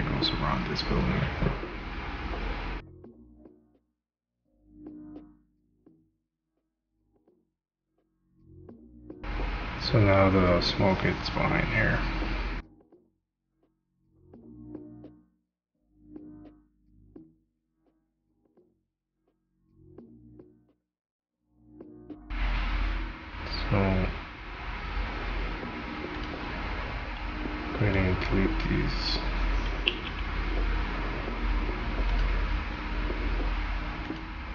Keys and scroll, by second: 7.4 shift+/, 13.9 shift+/, 22.3 Delete, 32.8 ctrl+z.